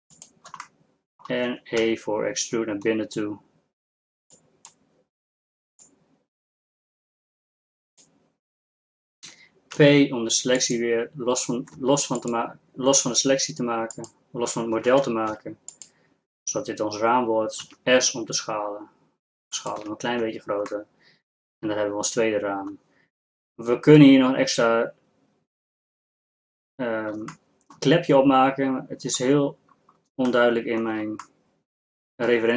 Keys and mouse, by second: 1.9 e, 6.1-8.1 drag, 9.8 p, 11.9 Tab, 12.3 click, 13.4 Tab, 14.9 ctrl+Tab, 17.7 s, 20.3 Tab, 30.8-32.5 middle drag.